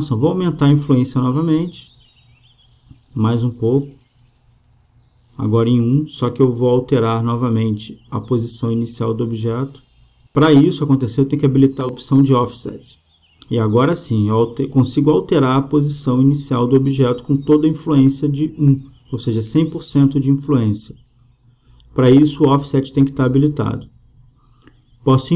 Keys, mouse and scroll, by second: 2.6-4.5 drag, 5.1-7.0 drag, 9.6-10.6 drag, 11.6-13.4 drag, 14.6 click, 15.7-17.4 drag, 17.9-21.3 drag.